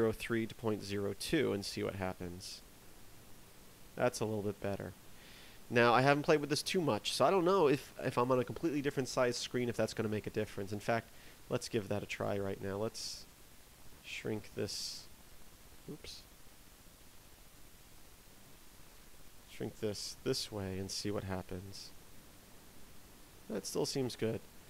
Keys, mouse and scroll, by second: 12.0 click, 18.3 click, 20.0 click.